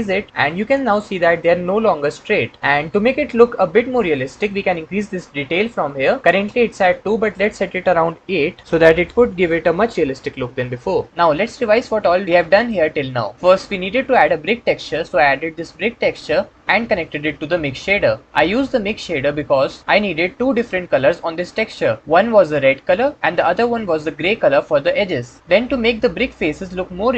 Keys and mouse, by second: 7.3-8.6 drag.